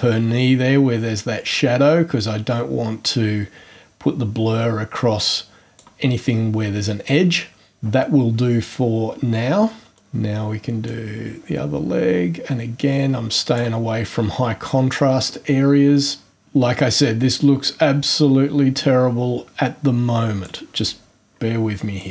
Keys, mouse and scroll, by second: 9.9 click, 10.8-13.7 drag, 16.3-20.6 drag, 22.0 click.